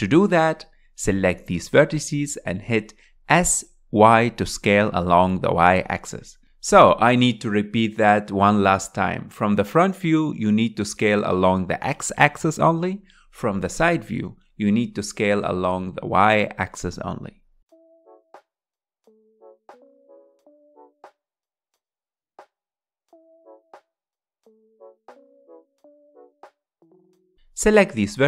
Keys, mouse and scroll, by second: 0.5 s, 6.5 s, 9.6-11.1 drag, 13.2 click, 14.5 s, 16.5 click, 17.8 click, 18.1 s, 19.3 click, 19.9 click, 20.3 s, 21.4 click, 22.0 shift+middle click, 22.4 click, 22.8 s, 23.7 click, 24.6 s, 25.8 s, 26.9 click.